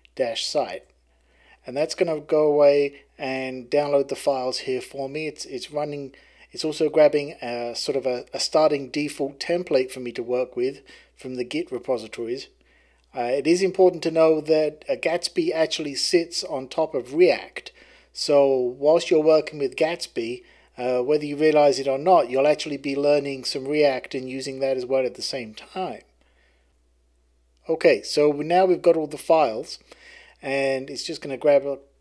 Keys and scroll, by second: 0.0-1.2 typing, 0.6 Return.